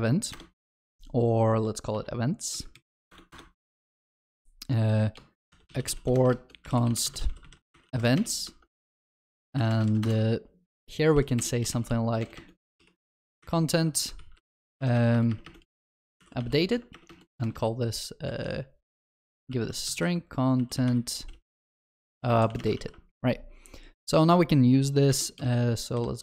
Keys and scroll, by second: 2.7 shift+F6, 22.9 ctrl+s.